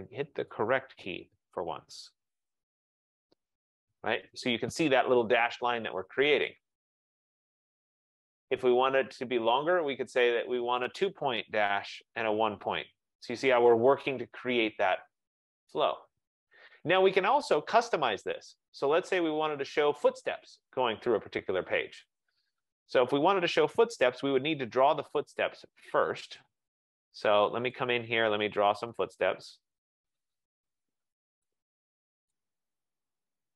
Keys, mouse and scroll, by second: 2.8 ctrl+=, 3.4 ctrl+=, 3.9 ctrl+=, 6.6 click, 8.2 click, 10.9 click, 11.7 2, 11.9 Tab, 21.1 click, 22.7 scroll, 22.9 middle click, 23.3 middle click, 24.1 typing, 25.7 click, 26.5-27.5 click, 27.8 click, 30.4 click, 32.4 click.